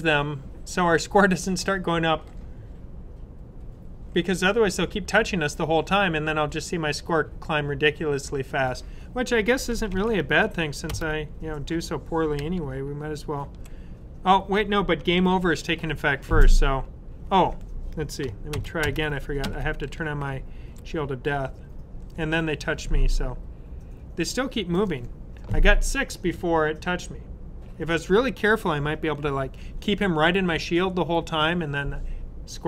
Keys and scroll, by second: 9.8 super+s.